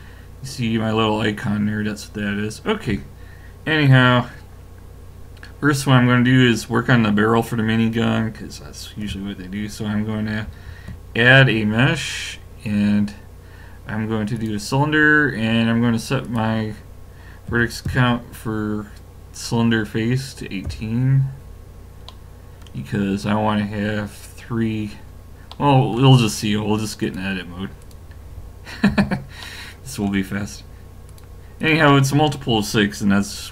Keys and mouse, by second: 1.1-5.4 middle drag, 10.5 shift+a, 16.2 click, 22.2-26.4 middle drag, 26.8 middle click, 27.0 click, 27.9 click, 28.9 a, 29.4-33.3 drag.